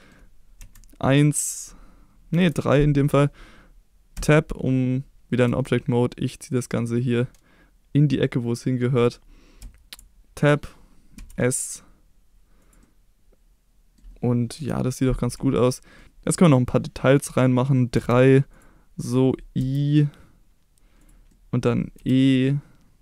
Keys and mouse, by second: 0.6 KP_1, 2.4 KP_3, 4.1 Tab, 5.4 g, 8.9 click, 9.6 Tab, 11.1 s, 12.6 click, 12.8-13.9 middle drag, 14.5 KP_3, 15.6 shift+middle click, 16.0 2, 17.9 3, 18.5 click, 19.6 i, 21.0 click, 21.3 middle click, 21.9 e.